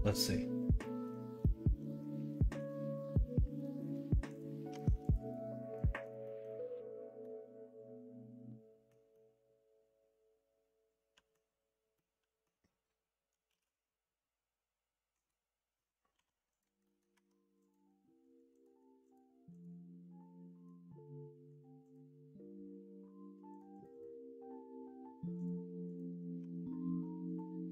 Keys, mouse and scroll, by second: 0.8 middle drag, 1.4-2.5 middle drag, 2.9 middle drag, 3.6 middle drag, 4.7 Tab, 5.8 middle click, 6.2 middle click, 7.2-8.9 middle drag, 9.1-11.3 middle drag, 11.9 middle click, 13.5 shift+d, 16.1 p, 16.8 middle click, 17.2 Tab, 26.4 Tab.